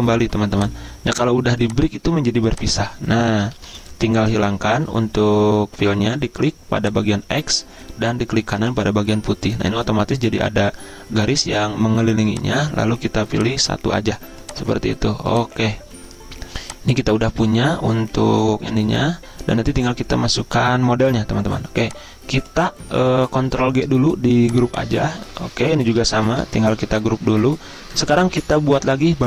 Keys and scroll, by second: 3.5 ctrl+z, 23.4 ctrl+g.